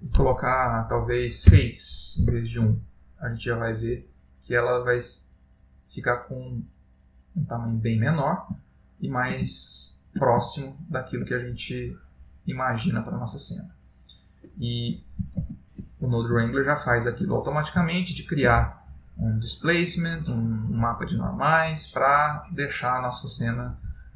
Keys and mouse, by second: 4.2 middle click, 8.7 ctrl+middle click, 9.7 shift+middle click, 10.5 ctrl+middle click, 12.2 middle click.